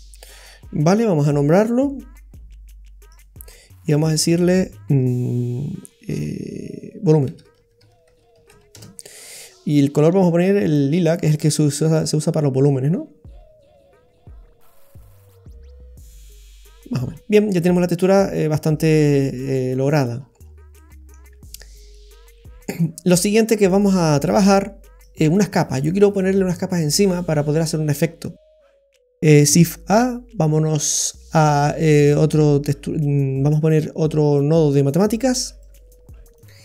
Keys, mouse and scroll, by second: 0.4-1.0 scroll up 7, 1.0 middle click, 3.1 click, 3.9 click, 10.7 click, 11.0 click, 17.1 scroll down 2, 18.7-19.4 scroll up 3, 19.4 middle click, 20.2-20.6 scroll down 5, 20.7 middle click, 21.9 click, 23.2 middle click, 25.0 click, 27.8-28.4 scroll up 4, 28.4 middle click, 29.5 shift+a.